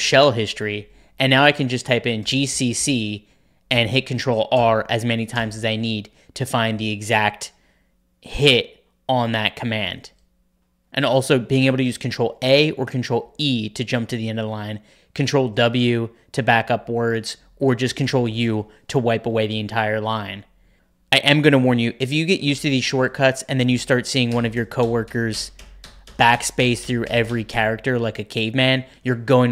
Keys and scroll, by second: 1.9-3.2 typing, 3.6 ctrl+r, 4.5 ctrl+r, 5.3 ctrl+r, 12.0 ctrl+a, 13.1 ctrl+e, 15.3 ctrl+w, 15.6 ctrl+w, 17.9 ctrl+u, 20.7 ctrl+u, 22.4 ctrl+p, 22.5 ctrl+p, 24.2-28.7 typing.